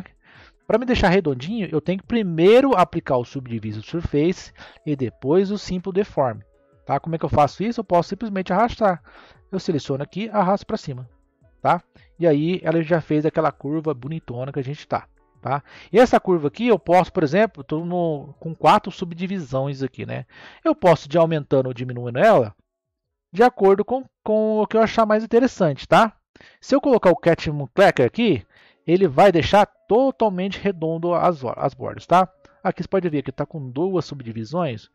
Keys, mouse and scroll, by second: 7.6-10.8 drag, 11.8 scroll down 2, 12.4-16.7 middle drag, 16.7-21.1 drag, 21.1-24.1 middle drag, 25.8-28.6 drag, 29.1-32.2 middle drag.